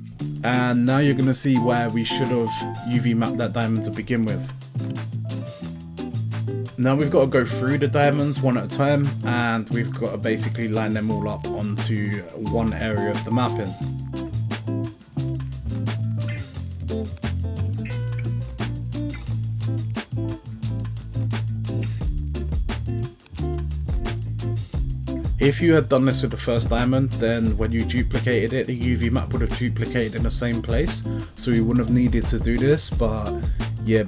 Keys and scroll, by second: 2.5 a, 5.8 u, 14.4 l, 17.9 g, 20.2 g, 21.8 g, 23.2 l, 24.6 g, 27.0 g, 29.0 g, 31.3 l.